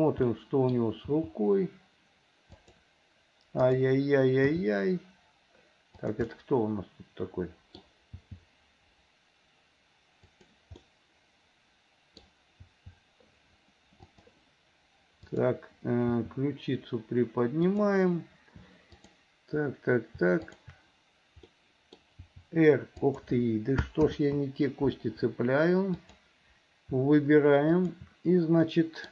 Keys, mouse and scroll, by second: 0.2 middle click, 1.2 g, 3.6 click, 4.5 g, 6.3-7.8 middle drag, 8.1 g, 10.8-12.3 middle drag, 12.7 g, 15.2 click, 16.2 r, 19.0 click, 20.5 shift+click, 21.5 middle click, 22.3 r, 24.2 ctrl+z, 26.0 click, 27.7 shift+click, 28.7 middle click.